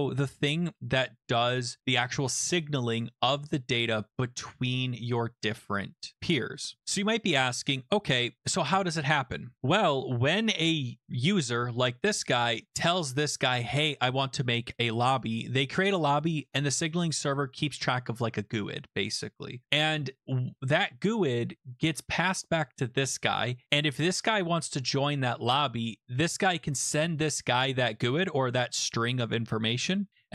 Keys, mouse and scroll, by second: 6.8 click, 6.8 scroll, 11.2 click, 13.3 click, 24.0 click, 26.1 click, 27.1 click.